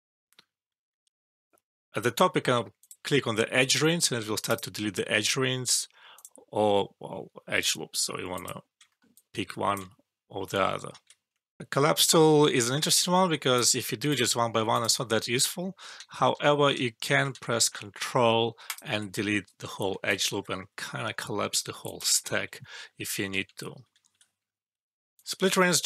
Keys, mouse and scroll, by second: 2.7 click, 8.9 alt+middle click, 9.4 alt+drag, 10.9 ctrl+z, 11.6 alt+F12, 13.5 click, 16.0 ctrl+z, 17.3 ctrl+z, 18.6 ctrl+click, 20.0 ctrl+click, 20.7 alt+middle click, 21.8 ctrl+click, 22.6 alt+middle click, 23.3 ctrl+z, 24.7 alt+`, 25.1 click.